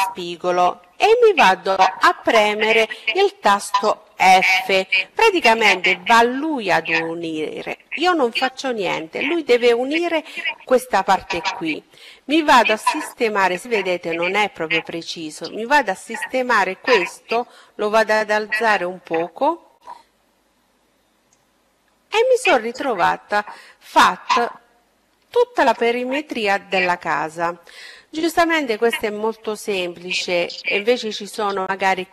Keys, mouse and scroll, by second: 2.8 f, 10.9-13.8 middle drag, 14.3-16.2 right drag, 15.7-17.3 drag, 20.7-21.8 middle drag, 22.8-25.9 middle drag.